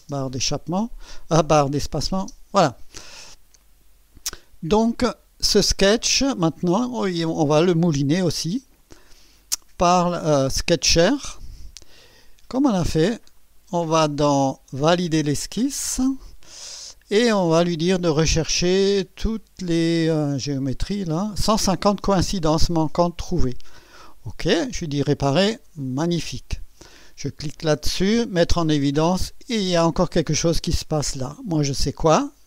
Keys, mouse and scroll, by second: 1.7 click, 2.2 space, 3.2 scroll up 2, 3.8 scroll up 2, 8.8 click, 10.6 click, 13.4 click, 15.5 click, 20.0 click, 24.3 click, 25.5 click, 28.5 click.